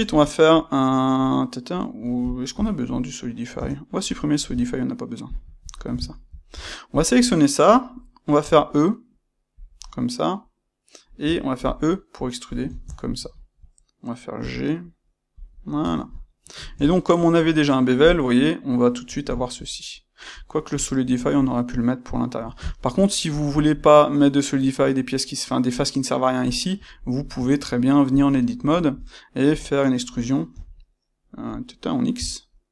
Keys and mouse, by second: 3.5 Tab, 4.0 space, 6.4 Tab, 6.8 click, 7.1-9.6 middle drag, 8.4 e, 9.6 click, 9.7-12.5 middle drag, 11.2 e, 12.5 click, 12.6-15.3 ctrl+shift+middle drag, 14.3 g, 15.3 click, 15.7 Tab, 16.2-27.2 middle drag, 27.5 Tab, 28.0 click, 28.2 middle click, 30.5 e.